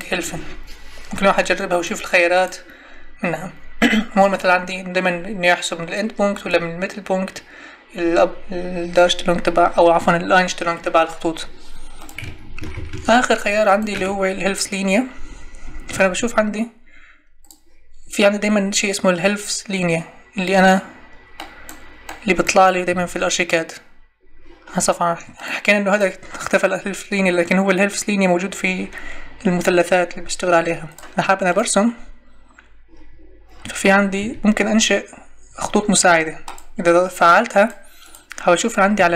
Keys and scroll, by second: 12.4 Escape, 15.9 Escape, 22.9 Escape, 34.2 Escape, 38.9 Escape.